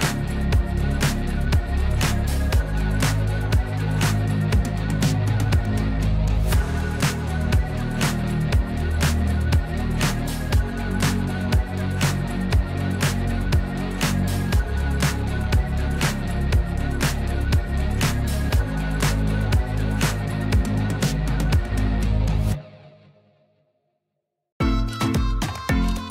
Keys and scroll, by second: 1.9 m, 5.6 F2, 5.9 F3, 12.4 F2, 22.8 p.